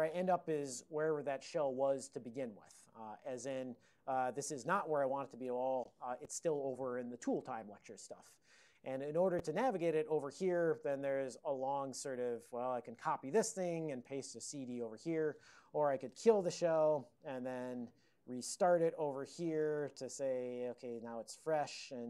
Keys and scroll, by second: 5.0-5.9 typing, 16.1 ctrl+x, 16.9 Return, 16.9 k, 17.7 y, 18.5 alt+o, 18.9 alt+x, 19.5 ctrl+g, 19.9 alt+o, 20.2 alt+x, 20.5-21.7 typing.